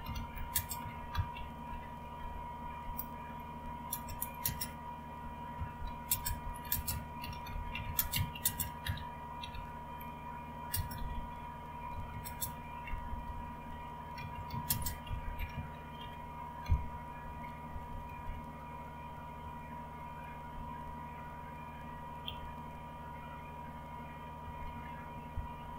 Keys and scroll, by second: 0.0-21.0 typing, 22.0-22.8 typing, 24.1-25.7 typing.